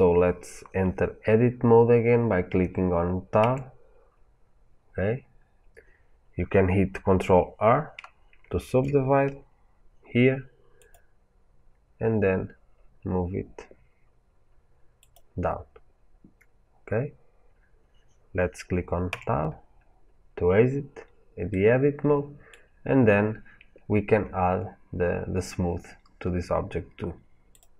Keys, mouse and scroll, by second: 3.3 Tab, 4.9-5.4 scroll up 1, 8.5 ctrl+r, 15.0 click, 19.0 Tab, 19.9-20.5 scroll down 1, 21.4-27.4 middle drag, 22.5-26.0 scroll up 2, 26.0-26.8 scroll up 1, 27.4-27.7 drag.